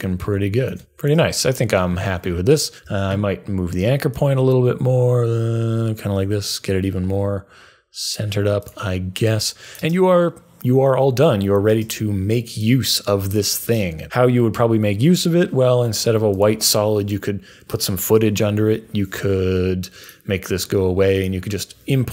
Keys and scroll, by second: 2.8 a.